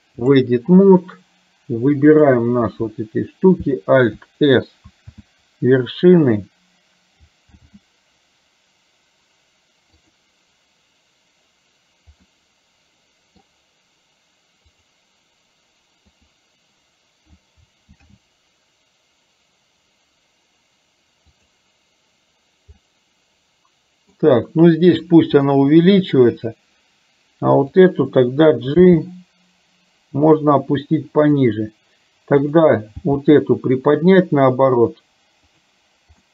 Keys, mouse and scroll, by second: 4.9 alt+s, 7.7 alt+s, 12.4-13.7 middle drag, 18.1 alt+s, 22.9-24.3 middle drag, 25.5 middle click, 27.7 click, 28.9 g, 33.2 g.